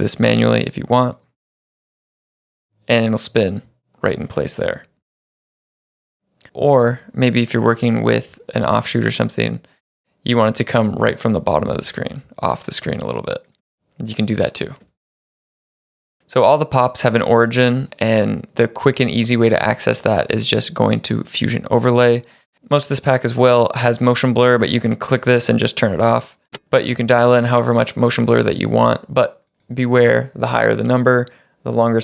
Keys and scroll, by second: 2.2 space, 4.6 space, 5.0 space, 6.5 space, 11.8 space, 13.6 space, 14.8 space, 26.5 space.